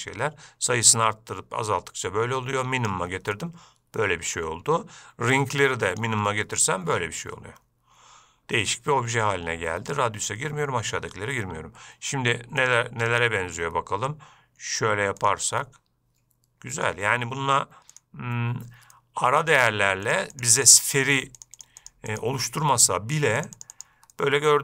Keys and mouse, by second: 3.6-4.6 middle drag, 5.6 click, 6.5-9.0 middle drag, 12.8 click, 13.3 click, 15.8-17.1 middle drag, 19.2-19.7 middle drag, 20.6 click, 20.8 click, 21.7 click, 21.8 click, 22.1 click, 22.4 click, 23.6 click, 23.8 click, 24.0 click, 24.4-24.6 middle drag.